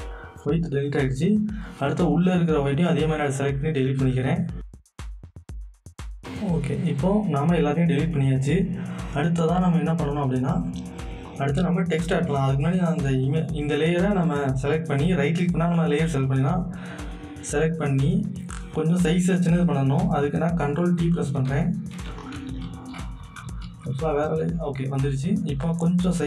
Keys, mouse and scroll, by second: 1.3 click, 1.4 click, 2.5 click, 12.6 right click, 16.2 click, 21.4 ctrl+Num_Lock, 21.4 click, 21.5 ctrl+t, 22.2 click, 22.6 ctrl+t, 23.6 ctrl+t, 25.7-26.2 alt+drag.